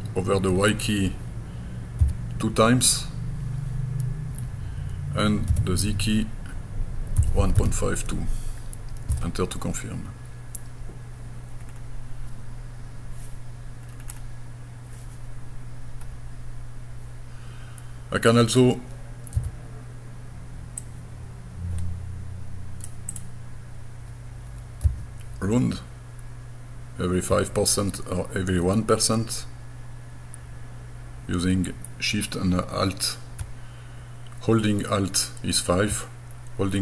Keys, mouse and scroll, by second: 2.0 KP_2, 5.5 z, 7.2 KP_1, 7.4 KP_Decimal, 7.6 KP_5, 9.1 KP_Enter, 11.7-13.9 scroll down 3, 16.1 scroll up 1, 17.4-18.6 scroll up 1, 19.4 s, 20.8-22.9 drag, 23.1 click.